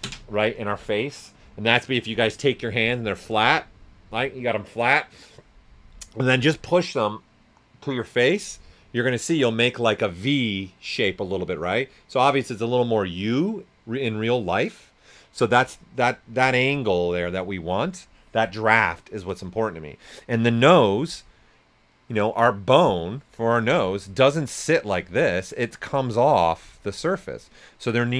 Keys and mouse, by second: 23.6 right click, 23.6 typing, 24.9 right click, 25.8 click, 26.5 s, 26.5 click.